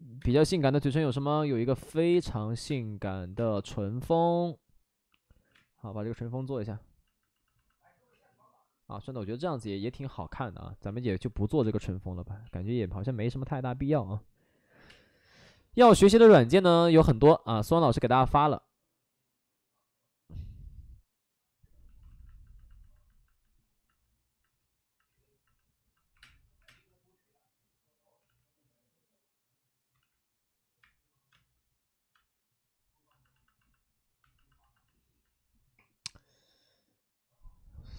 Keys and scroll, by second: 0.1 space, 2.1 space, 2.6 space, 3.2 1, 3.3 space, 5.3 ctrl+z, 5.5 space, 8.0 ctrl+z, 9.1 ctrl+z, 11.1 alt+s, 11.6 3, 12.4 ctrl+z, 14.7 5, 14.8 space, 22.0 alt+s, 26.1 3, 26.1 space, 26.5 3, 26.6 space, 28.2 ctrl+z, 29.9 ctrl+z, 30.8 space, 31.2 space.